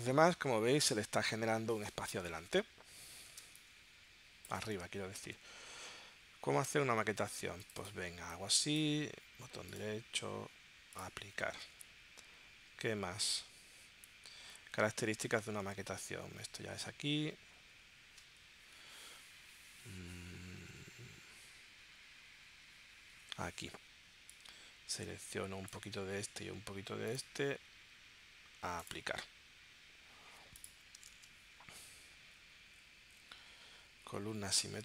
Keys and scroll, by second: 5.3 super+Tab, 6.7 super+Tab, 11.8 super+Tab, 15.8 super+Tab, 31.2 super+Tab.